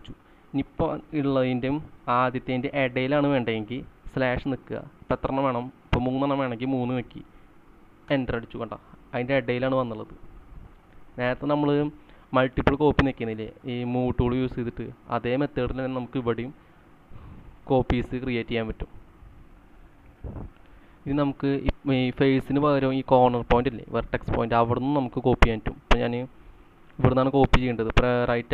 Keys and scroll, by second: 0.0-0.4 typing, 3.9-4.6 typing, 6.6 3, 8.1 Return, 20.3 c, 28.4 Right.